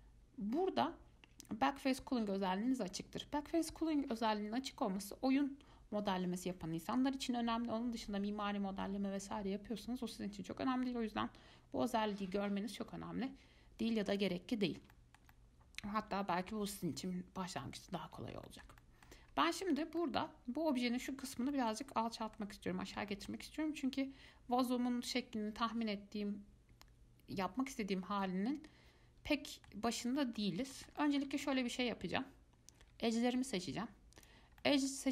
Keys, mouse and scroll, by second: 15.1-18.4 shift+middle drag, 18.4 scroll down 2, 18.6 scroll up 1, 18.7 shift+middle click, 19.5 scroll up 1, 19.7-26.3 middle drag, 28.4-34.2 middle drag, 34.4 click, 34.8 middle click.